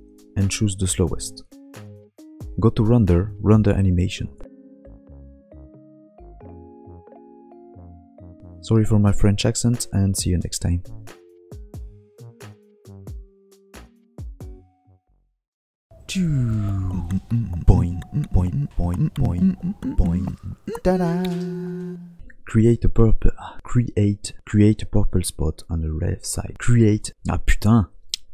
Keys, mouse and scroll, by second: 2.4 ctrl+shift+s, 3.4 click.